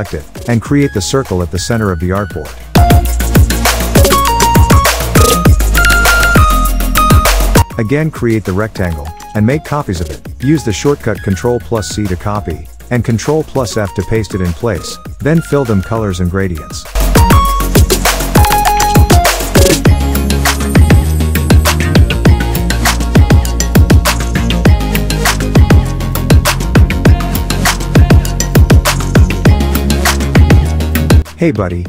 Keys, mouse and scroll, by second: 1.8 alt+scroll up 1, 2.0 space, 2.1 click, 2.3 space, 3.2-7.2 drag, 7.8-8.1 alt+scroll up 2, 10.0 click, 11.3 ctrl+c, 11.5 ctrl+f, 12.4-14.2 drag, 14.6 click, 15.1 ctrl+f, 15.8-16.7 drag, 31.2 click.